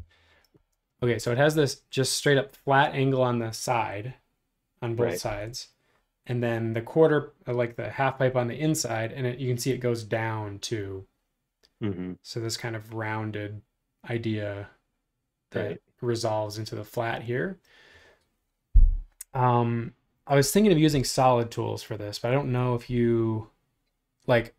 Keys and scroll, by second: 0.1 super+-.